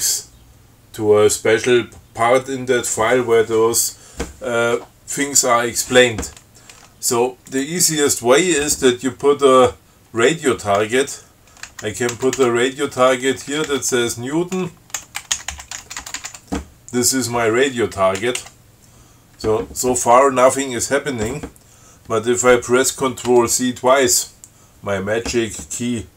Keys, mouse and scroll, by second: 7.7 click, 11.9 <, 13.9-16.6 typing, 18.4 BackSpace.